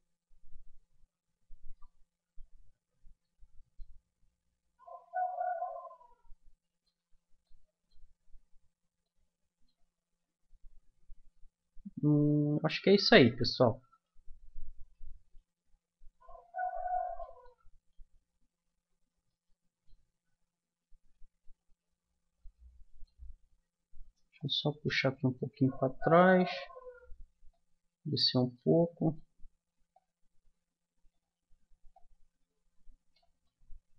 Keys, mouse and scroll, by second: 2.2-3.2 middle drag, 3.2 Tab, 7.0 Tab, 13.1-18.6 middle drag, 19.8-22.9 middle drag, 24.4-26.0 drag, 26.5-27.5 middle drag, 27.5-28.5 drag, 28.5-30.7 middle drag, 30.7-31.7 drag, 31.9-33.4 drag, 33.4 middle click.